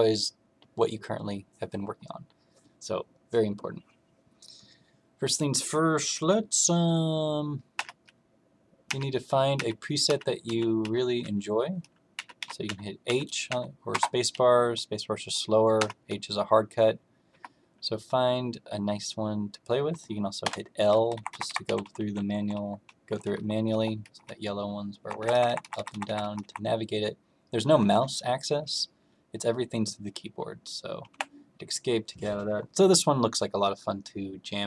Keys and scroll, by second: 7.7 h, 8.8-13.4 typing, 15.7 h, 17.2 h, 20.4 l, 21.1 Up, 21.2 Up, 21.4 Up, 21.6 Down, 21.8 Down, 21.9 Down, 22.1 Down, 22.3 Down, 22.5 Down, 23.0 Page_Down, 23.2 Page_Down, 23.7 Page_Up, 24.2 Up, 25.1 Up, 25.3 Up, 25.4 Up, 25.6 Up, 25.7 Up, 25.9 Up, 26.0 Up, 26.2 Up, 26.3 Up, 31.0 Escape.